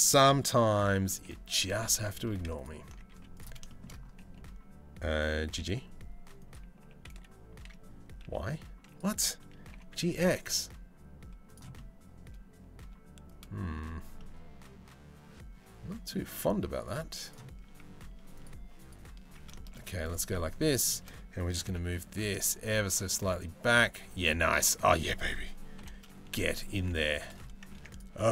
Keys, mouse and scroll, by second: 1.4 z, 2.7 z, 3.3 shift+middle click, 5.1 g, 6.4 g, 11.4-13.3 middle drag, 11.4 g, 13.8-15.7 middle drag, 16.0 Tab, 16.4 click, 17.2 Tab, 18.0 Tab, 18.9 Tab, 19.1-20.2 shift+middle drag, 21.2 g, 25.4 ctrl+l, 26.1 middle click, 26.5 3, 27.4 Tab, 27.5 click, 27.7 Tab.